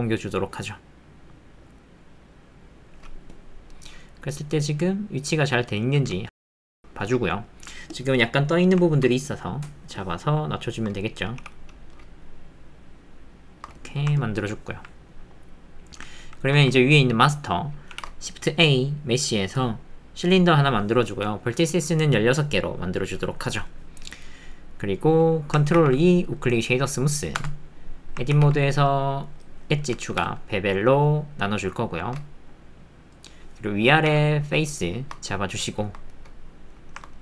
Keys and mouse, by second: 4.9-6.1 middle drag, 6.1 alt+click, 6.4 ctrl+click, 7.0 ctrl+click, 8.2 click, 9.3 shift+click, 11.4 g, 14.5 ctrl+middle click, 15.0-16.3 drag, 17.9 shift+a, 20.4 shift+a, 23.0-24.6 drag, 24.6 middle click, 24.7 click, 24.8 middle click, 25.8 ctrl+2, 27.4 Tab, 28.3 ctrl+r, 30.1 ctrl+b, 34.1 3, 34.8 shift+middle click, 35.2 click, 35.3 middle click, 35.4 click, 35.5 middle click, 36.1 middle click, 36.9 ctrl+shift+middle click.